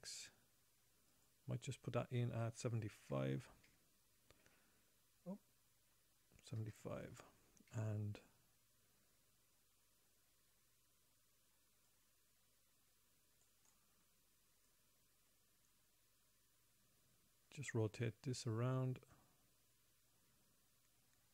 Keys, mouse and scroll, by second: 1.5 click, 12.2 click, 12.4 click, 15.0 click.